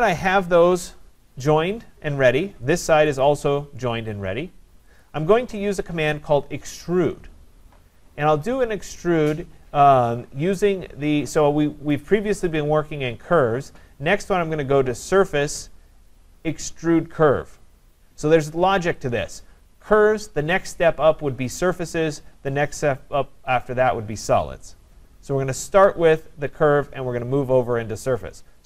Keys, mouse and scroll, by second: 1.9-3.2 scroll up 4, 3.2 click, 5.0 click, 12.1 click.